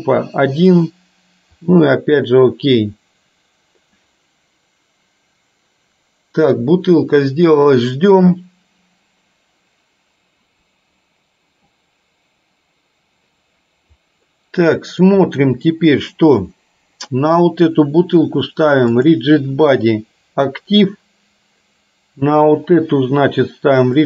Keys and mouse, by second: 14.4 middle click, 19.1 click, 22.3 click, 23.9 click.